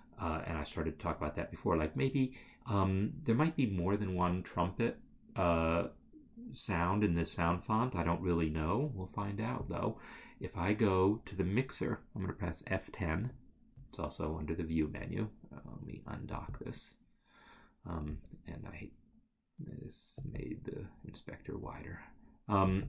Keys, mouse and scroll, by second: 11.0 click, 13.2 click, 13.4 F10, 16.4 F10, 16.6 click, 20.3 click, 22.7 click.